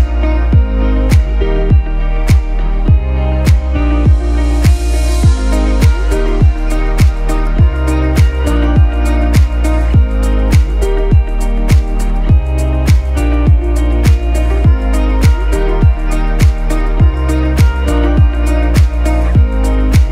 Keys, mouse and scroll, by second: 2.9-6.9 drag, 10.0-20.1 drag.